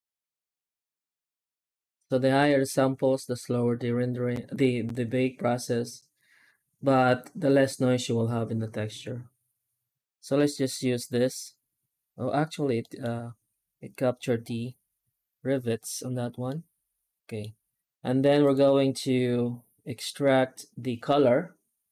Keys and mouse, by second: 7.1-9.8 drag, 12.7 middle click, 16.4-17.2 middle drag, 18.4-21.5 drag.